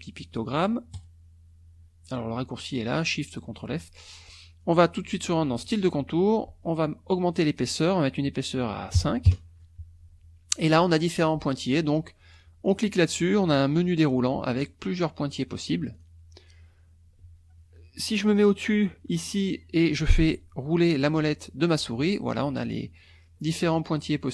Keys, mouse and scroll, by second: 5.6 click, 7.3 click, 7.6 click, 9.0 KP_5, 9.3 KP_Enter, 10.7 click, 11.8 click, 12.7 click, 13.9-14.6 scroll down 4, 15.9 click, 20.7 scroll down 2, 21.3-21.9 scroll down 2, 21.9-24.3 scroll down 18.